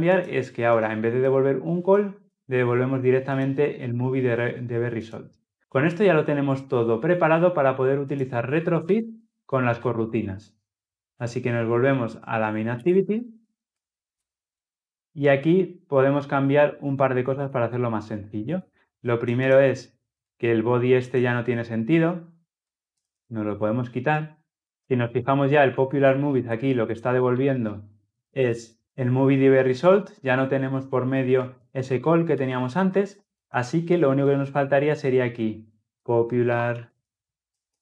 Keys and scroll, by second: 8.6 ctrl+alt+l, 10.0 ctrl+alt+o, 27.2 alt+Return, 28.8 Return, 31.4 ctrl+z, 32.3 ctrl+z.